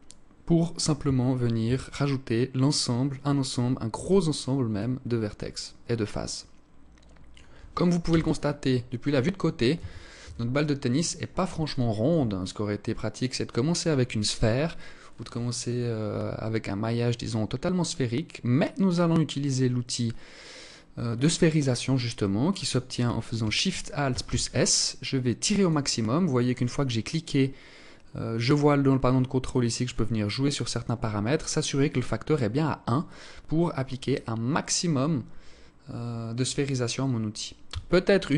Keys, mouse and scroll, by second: 1.1 a, 3.8 alt+right click, 4.9 alt+click, 7.5 KP_1, 9.2 a, 11.2 alt+shift+click, 11.9-12.4 scroll up 1, 12.4 scroll down 1, 12.5 scroll down 1, 23.5 alt+shift+s, 29.1 click, 37.1 Tab.